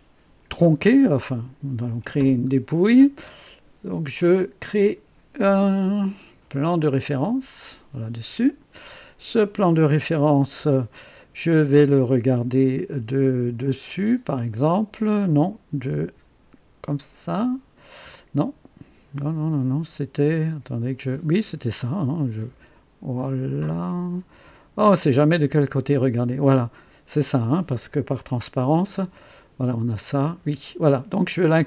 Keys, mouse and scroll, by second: 7.2 click, 12.7 KP_2, 13.9-15.1 right drag, 16.0 KP_1, 19.2 KP_5, 20.1-21.8 drag, 22.4 KP_3, 24.3 KP_5, 24.3 KP_5, 28.9 &, 30.4 &.